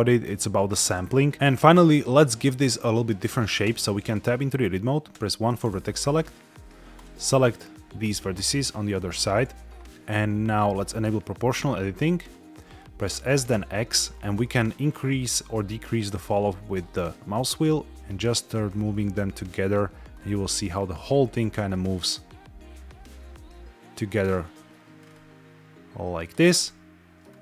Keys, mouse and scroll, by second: 1.3 shift+middle click, 1.6 middle click, 2.1 scroll up 1, 3.6 Tab, 5.0 1, 6.8 click, 8.2 shift+click, 10.6 click, 13.1 s, 13.4 x, 14.0-14.6 scroll down 7, 14.8-15.4 scroll up 7, 16.1 scroll down 2, 16.6-17.0 scroll up 4, 17.8 scroll down 2, 17.9 scroll up 1, 18.3-18.8 scroll down 5, 20.0 scroll down 2, 20.9-21.2 scroll up 3, 21.6 scroll down 3, 24.2-24.5 scroll down 3, 24.9 scroll up 2, 26.1 click, 26.4 middle click, 27.2 scroll down 1.